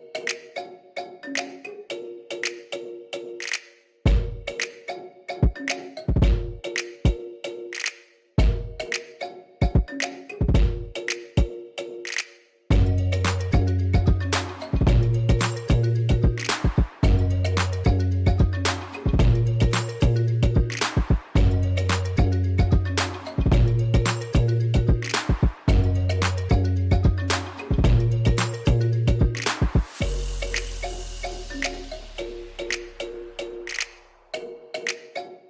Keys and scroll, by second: 11.9 ., 12.1 5, 12.4 Return.